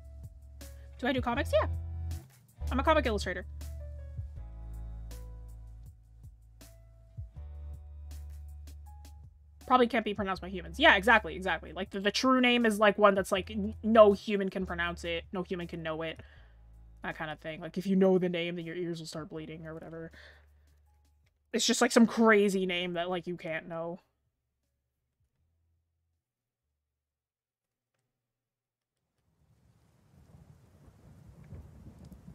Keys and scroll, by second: 20.7 scroll down 1, 21.4 scroll up 1, 23.3-24.5 scroll up 1.